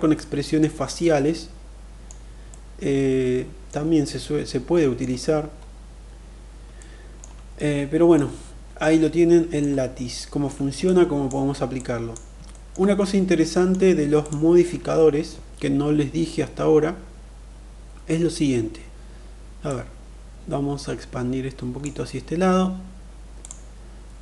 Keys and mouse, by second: 0.7-1.9 middle drag, 2.3-3.5 middle drag, 3.8 middle click, 6.5 alt+middle click, 7.3 middle click, 8.6 middle click, 10.0 shift+middle click, 10.5 click, 11.6 click, 12.3 shift+middle click, 12.8 middle click, 13.9 click, 19.5-21.6 drag, 23.2 click.